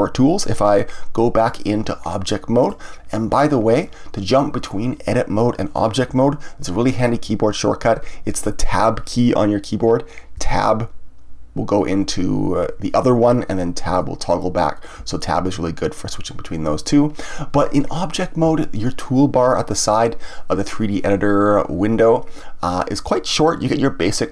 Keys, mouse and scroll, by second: 1.3-6.7 drag, 10.4 Tab, 13.9 Tab.